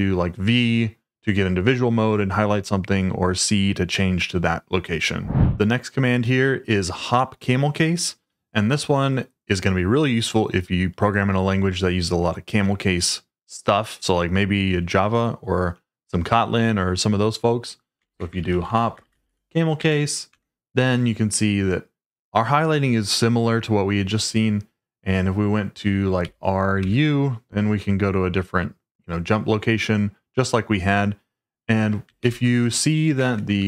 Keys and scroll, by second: 18.0-19.9 typing, 20.3 Return, 26.2 r, 26.8 u, 32.2 ctrl+o, 33.2-33.6 typing.